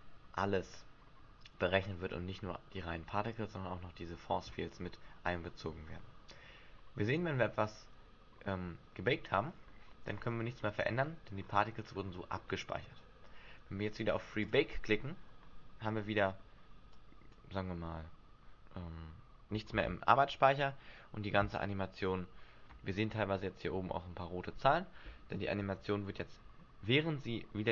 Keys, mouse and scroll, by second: 9.3-10.1 scroll down 4, 10.1-10.6 scroll down 7, 10.5-11.8 scroll up 13, 14.4 click, 16.9 click, 19.6 alt+a, 25.6 Escape.